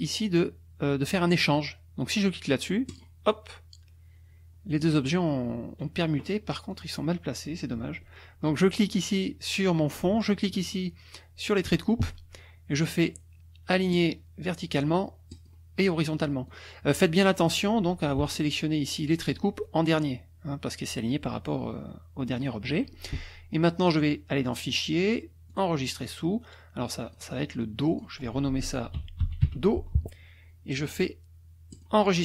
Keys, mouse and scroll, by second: 2.9 click, 4.7 click, 6.7 click, 10.6 shift+click, 13.9 click, 15.3 click, 16.4 click, 17.5 click, 18.2 shift+click, 22.3 click, 24.5 click, 25.5 click, 27.1 click, 27.6 click, 28.7-29.9 typing, 31.7 click.